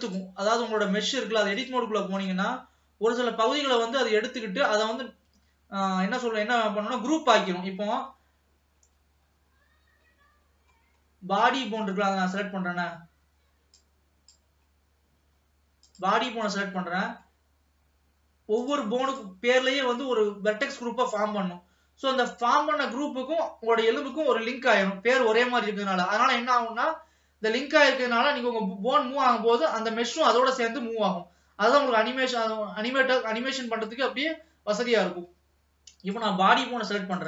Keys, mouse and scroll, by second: 1.6-2.8 drag, 2.8-3.6 scroll down 1, 3.6 scroll down 1, 3.9 click, 4.3 scroll up 1, 8.8-9.3 scroll up 3, 10.2-13.0 scroll up 21, 13.9 click, 14.8-16.0 scroll up 3, 16.0 click, 16.9-18.8 middle drag, 18.8 click, 19.3 click, 21.1 click, 36.2 click.